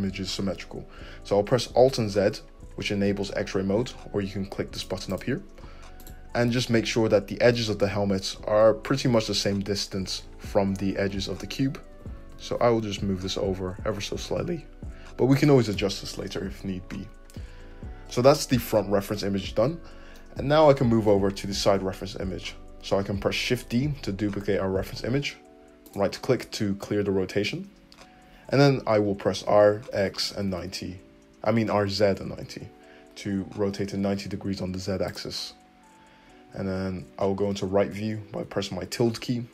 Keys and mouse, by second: 2.0 alt+z, 4.8-6.0 drag, 6.0 middle click, 6.3-15.4 drag, 11.9 g, 20.2-39.3 middle drag, 23.4 shift+d, 29.3 r, 37.9 `.